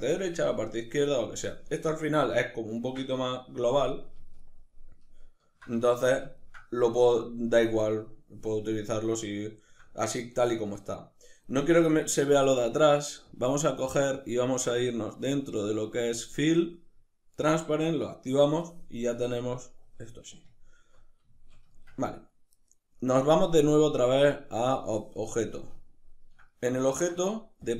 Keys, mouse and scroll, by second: 1.3-13.0 middle drag, 13.0 click, 15.7-17.1 drag, 18.8-23.1 middle drag, 23.1-25.2 drag, 25.2-27.3 middle drag, 27.3 click.